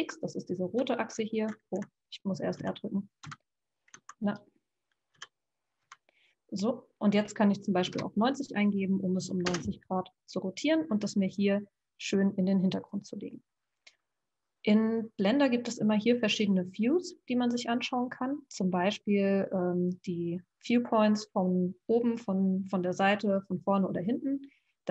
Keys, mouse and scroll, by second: 0.7 x, 2.6 r, 3.2 x, 4.2 click, 5.2 r, 15.6-18.8 drag.